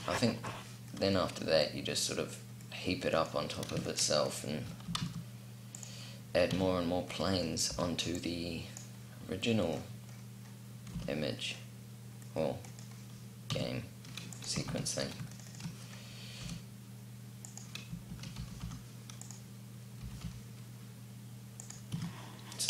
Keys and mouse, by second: 4.4 s, 6.1 a, 7.3 b, 10.8 c, 12.5-13.9 drag, 13.1 s, 14.2 ctrl+z, 16.0 s, 17.6 shift+d, 19.6 g, 21.5 a, 22.3 KP_0, 22.6 p.